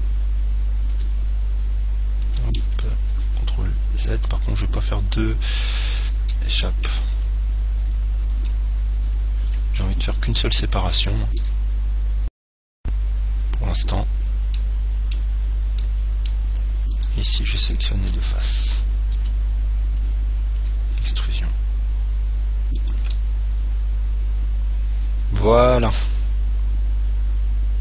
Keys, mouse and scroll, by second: 1.5-2.9 middle drag, 1.5 e, 8.7 ctrl+z, 9.3 ctrl+z, 11.7 e, 14.1 click, 14.7-17.8 middle drag, 17.2-19.8 right drag, 19.4 KP_7, 20.8 e, 23.1 click, 23.3-25.2 middle drag.